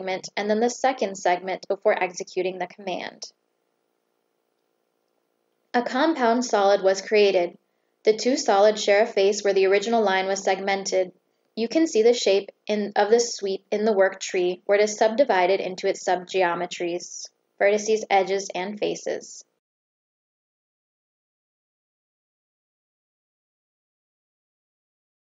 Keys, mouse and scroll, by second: 0.5 click, 2.9 click, 4.5 click, 5.1 right click, 8.4 click, 9.8 click, 10.5 click, 11.1 click, 12.8 click, 15.0 click, 15.8 click, 16.5 click, 17.2 click, 18.2 click, 18.7 click.